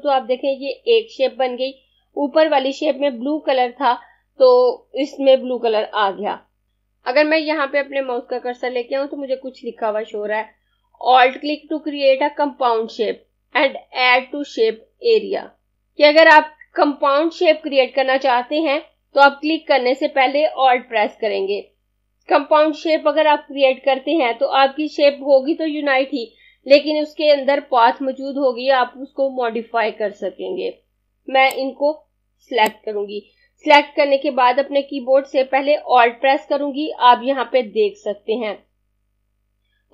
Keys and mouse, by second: 31.6 click, 35.8 alt+Num_Lock.